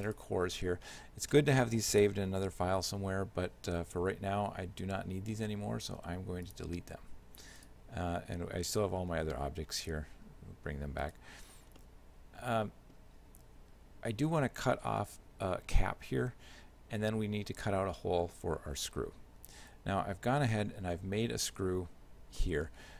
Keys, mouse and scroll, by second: 0.1 right click, 6.0 x, 7.6 right click, 9.1 alt+h, 11.1 right click, 11.8 shift+middle click, 21.5 shift+click, 22.4 middle click.